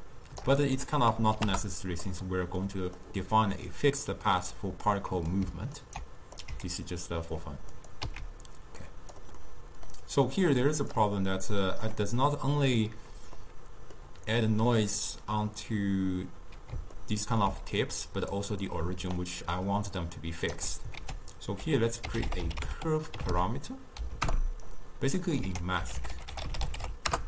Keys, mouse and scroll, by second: 2.7-5.0 middle drag, 5.0-5.9 drag, 5.9-6.4 ctrl+right drag, 6.5 click, 7.8 click, 8.1 x, 8.9 click, 9.5-10.6 middle drag, 10.6 click, 11.6-16.0 middle drag, 16.0-17.0 scroll up 2, 17.0-17.8 ctrl+middle drag, 17.8 d, 18.0 click, 18.5 d, 18.6 d, 18.8 click, 19.2-19.6 d, 19.7-20.7 right drag, 20.7 d, 21.1 ctrl+a, 25.5 ctrl+a.